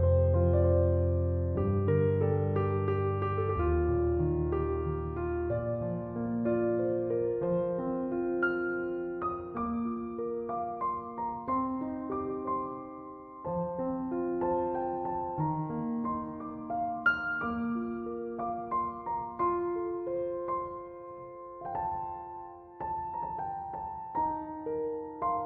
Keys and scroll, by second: 3.3-4.4 typing, 20.0 f, 22.7-24.0 typing.